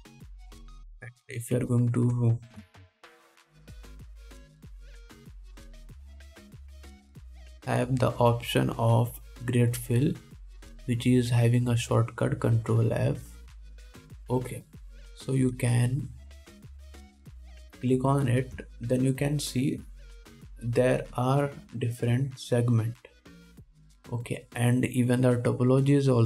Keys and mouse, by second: 1.2 shift+a, 2.8 F3, 6.5 BackSpace, 6.7 BackSpace.